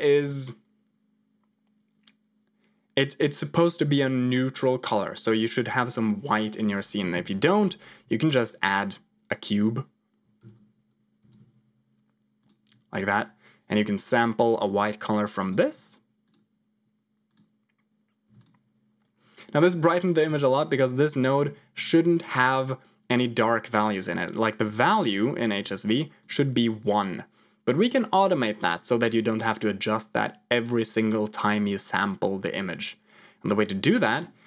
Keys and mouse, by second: 7.0 shift+a, 10.3 alt+g, 11.1 g, 14.4 click, 17.2 click, 18.2 x, 20.6 click, 23.6 click, 29.1 click, 33.9 middle click, 34.3 click.